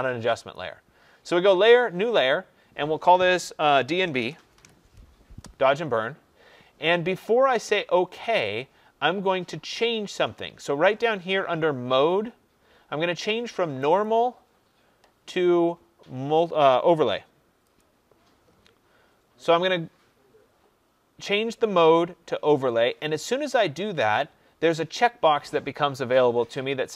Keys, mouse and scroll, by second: 0.5 click, 3.4-5.0 typing, 14.0 click, 17.8 click, 22.7-25.9 drag.